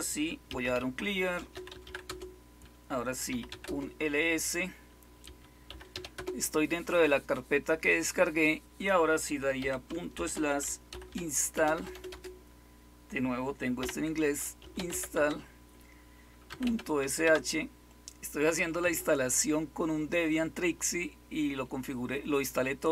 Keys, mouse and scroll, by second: 0.2-3.7 typing, 4.9-6.4 typing, 10.1-12.0 typing, 13.7-17.1 typing.